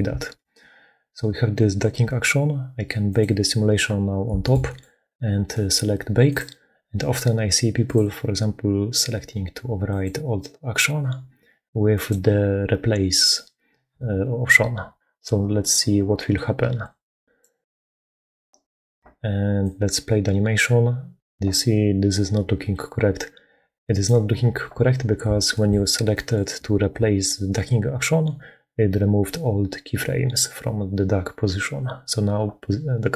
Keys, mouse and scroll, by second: 0.3 shift+space, 3.3 middle click, 4.3 shift+click, 5.4 click, 6.1-18.3 drag, 19.4-23.9 drag, 25.5 click, 25.8 middle click, 26.0 click, 26.2 shift+middle click, 26.8-33.1 middle drag.